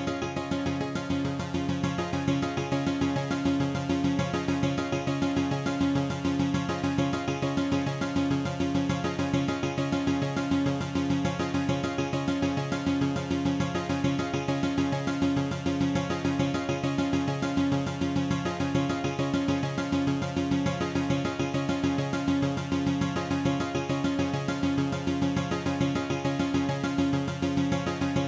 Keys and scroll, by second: 6.8 F9.